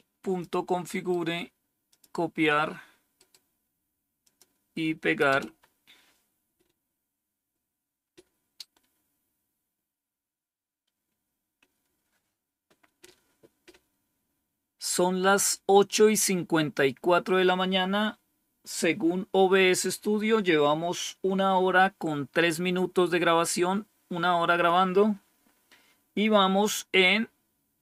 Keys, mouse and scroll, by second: 0.8 right click, 1.7 click, 3.0 right click, 4.1 click, 5.1 Return, 7.9-8.5 scroll up 1, 8.5-9.9 scroll up 1, 9.9 scroll down 2, 10.7 scroll down 2.